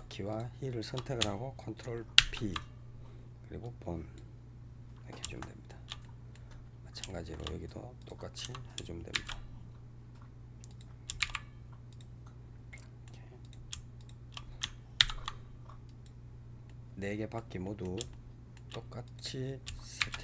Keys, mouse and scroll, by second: 0.2 shift+click, 2.0 ctrl+p, 5.2-7.9 shift+middle drag, 7.9 click, 9.0 shift+s, 10.6 click, 11.1 shift+s, 12.6-13.3 middle drag, 13.3 click, 13.8 shift+click, 14.9 ctrl+p, 16.5-19.0 middle drag, 19.0 click, 19.9 shift+s.